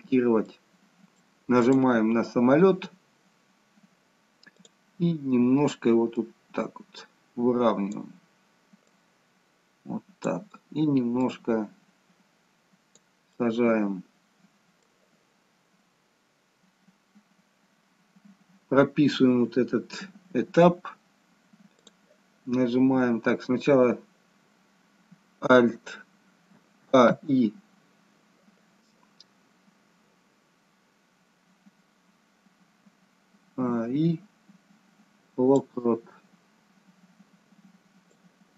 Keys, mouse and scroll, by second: 0.5 middle click, 1.7 click, 2.1-3.5 scroll down 1, 4.7 click, 6.3 click, 8.8 click, 11.2 click, 13.4 middle click, 21.9 click, 25.5-26.6 a, 26.8 a, 27.1 i, 33.4 a, 33.6 i, 38.2 click.